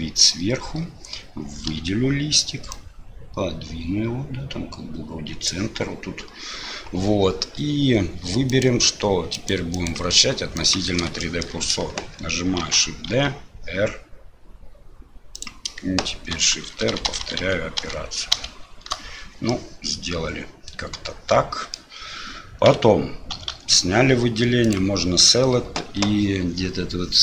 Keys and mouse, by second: 1.7 l, 2.7-5.5 drag, 8.5-9.5 drag, 9.9 click, 11.3 shift+click, 12.6 shift+d, 16.3-18.9 shift+r, 19.6-21.8 middle drag, 22.7 a, 23.3 a, 24.6-27.2 drag.